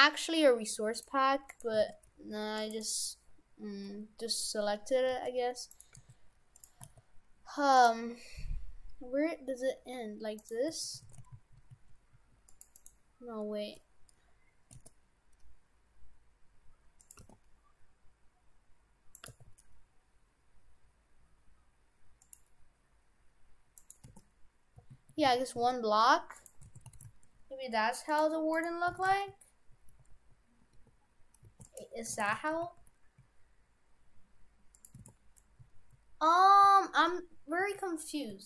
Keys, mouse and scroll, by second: 1.5 right click, 1.8 shift+f, 2.9 right click, 5.1 g, 6.0 g, 6.9 s, 8.7-9.9 scroll down 2, 10.4 right click, 11.1 shift+f, 12.8 right click, 14.7 s, 17.2 g, 19.3 g, 22.3 g, 23.8 right click, 24.1 shift+f, 26.7 shift+f, 28.6 right click, 28.9 shift+f, 31.9 Tab, 32.2 shift+f, 35.1 shift+f.